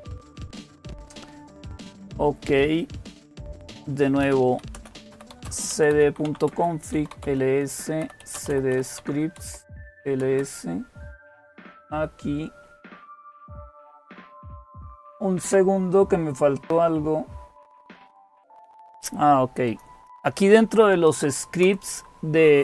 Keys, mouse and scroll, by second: 0.0 typing, 4.0-10.2 typing, 18.4 click, 19.5 click, 20.5-21.4 typing, 21.4 Return.